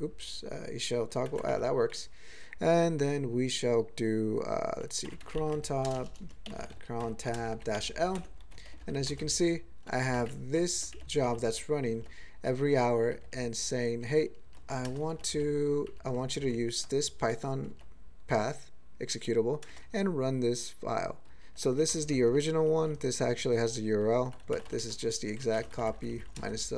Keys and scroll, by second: 5.0-6.4 typing, 7.8 ., 8.1 Return, 8.6 ctrl+p, 8.8 ctrl+p, 9.0 ctrl+a, 9.0 ctrl+space, 9.2 ctrl+e, 9.8 ctrl+g, 10.1 alt+m, 10.2 alt+f, 10.7 alt+f, 10.9 alt+f, 11.2 alt+b, 11.4 alt+b, 12.0 alt+f, 12.3 alt+f, 13.0 alt+f, 13.2 alt+f, 13.9 alt+b, 14.1 alt+b, 14.2 alt+b, 14.4 alt+b, 14.8 ctrl+space, 15.1 ctrl+alt+f, 15.3 ctrl+alt+f, 15.8 ctrl+alt+b, 16.0 ctrl+alt+b, 16.3 ctrl+alt+f, 17.3 ctrl+g, 17.6 ctrl+f, 19.6 ctrl+space, 21.2 ctrl+g, 21.9 ctrl+space, 22.0 ctrl+alt+b, 22.5 alt+f, 22.7 alt+f, 22.9 alt+b, 23.5 ctrl+g, 24.0 ctrl+e, 25.5 alt+<, 25.8 ctrl+n, 25.9 ctrl+n, 26.1 ctrl+n, 26.2 ctrl+n, 26.4 ctrl+space, 26.5 ctrl+e.